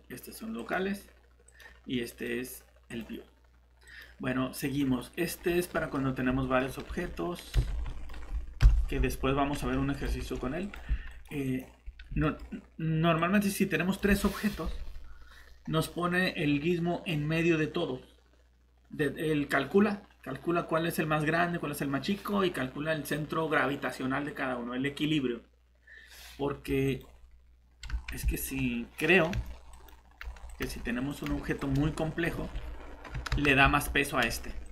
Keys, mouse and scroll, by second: 0.5 click, 5.4 scroll down 1, 5.7 middle click, 6.9 typing, 7.6 Escape, 7.6 scroll down 1, 7.8 scroll up 1, 7.9 middle click, 7.9 scroll down 1, 8.2-8.6 scroll up 1, 8.6 7, 9.5 shift+d, 9.9 click, 10.2 shift+d, 12.2 middle click, 12.4 scroll up 1, 13.2 click, 26.1 scroll down 1, 26.8 click, 27.9 shift+Tab, 32.3 Escape, 33.3 ctrl+z, 34.3 Tab.